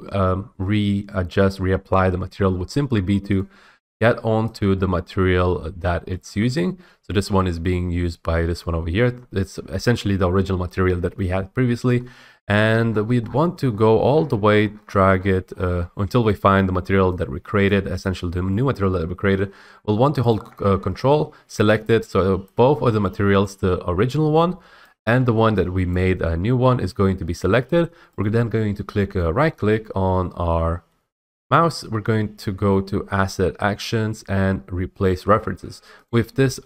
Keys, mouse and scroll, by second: 3.5 click, 4.7 click, 6.4 w, 6.6 right click, 7.2 right click, 8.4 right click, 12.0-13.2 middle drag, 12.0 scroll, 12.0 scroll, 12.1 scroll, 12.2 scroll, 12.6 scroll, 12.7 scroll, 12.8 scroll, 13.0 scroll, 13.1 scroll, 13.2-15.7 scroll, 15.4 scroll up 1, 15.7 scroll, 15.8-17.3 scroll, 17.3 scroll, 17.8 click, 20.5 ctrl+click, 23.6 click, 26.1 click, 28.1 click, 28.4-30.4 middle drag, 36.2-36.6 drag.